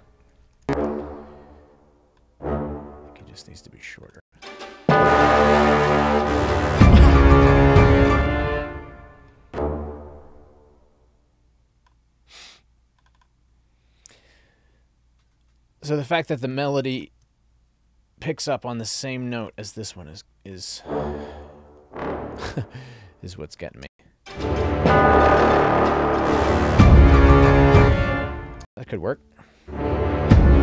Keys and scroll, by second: 0.5 alt+Up, 4.2 space, 8.1 space, 21.7 alt+shift+Down, 23.8 space, 27.7 space.